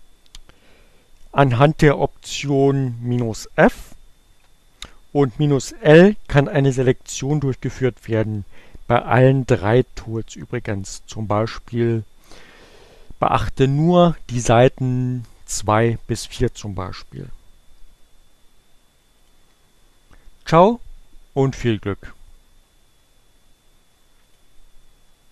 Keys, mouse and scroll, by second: 16.5 click, 21.9 click, 22.5 Up, 24.3 a.